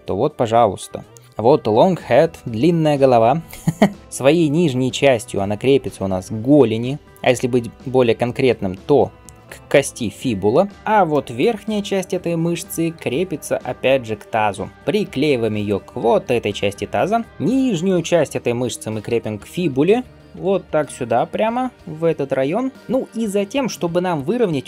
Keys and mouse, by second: 3.5 middle click, 10.7 Tab, 12.8 g, 17.3-24.6 middle drag, 18.9 g, 22.3 g, 23.1-24.6 drag.